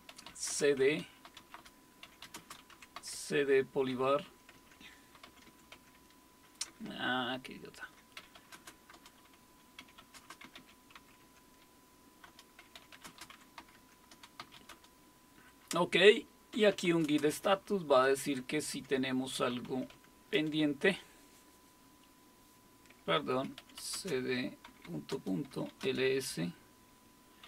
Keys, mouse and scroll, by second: 0.0-8.7 typing, 8.9 Return, 9.8-11.5 typing, 12.3 Return, 12.5-14.9 typing, 16.3-20.3 typing, 23.4-26.2 typing, 27.2-27.4 typing.